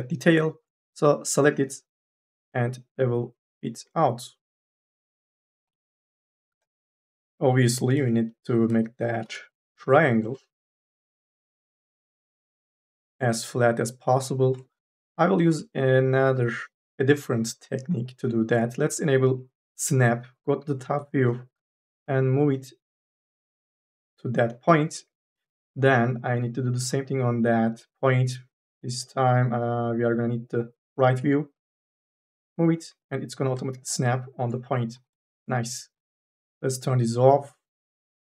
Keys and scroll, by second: 1.7 m, 2.2 s, 7.6-9.4 typing, 11.6 3, 15.0 1, 15.3 w, 34.8 3, 35.0 e.